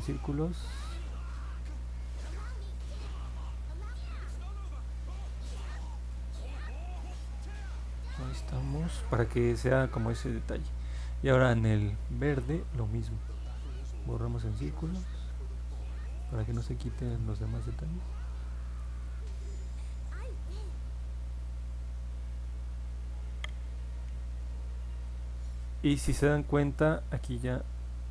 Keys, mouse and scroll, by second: 4.1-8.2 drag, 28.0 click.